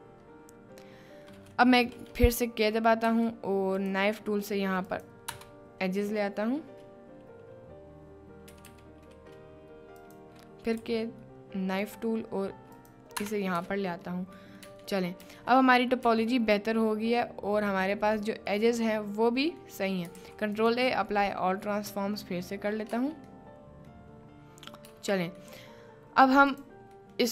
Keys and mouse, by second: 1.7 click, 2.4 click, 3.0 k, 8.5 g, 8.7 g, 10.8 k, 14.5 middle click, 14.8 Tab, 15.3 Tab, 15.5 middle click, 15.8 click, 16.1 Tab, 16.4-17.9 middle drag, 18.5-19.7 middle drag, 20.1 ctrl+a, 21.1-21.8 middle drag, 22.4-22.7 middle drag, 23.0 Tab, 23.4 right click, 24.8 Tab, 25.3 middle click, 26.5 click, 27.1 middle drag.